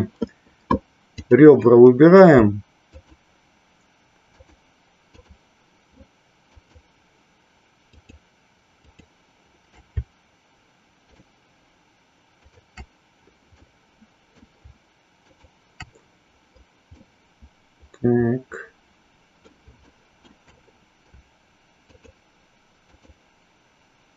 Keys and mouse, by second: 1.3 click, 2.8 shift+click, 4.3 shift+click, 5.0 shift+click, 6.5 shift+click, 7.8 shift+click, 8.8 shift+click, 11.0 shift+click, 13.6 middle click, 15.3 shift+click, 17.0-19.6 middle drag, 19.9 shift+middle click.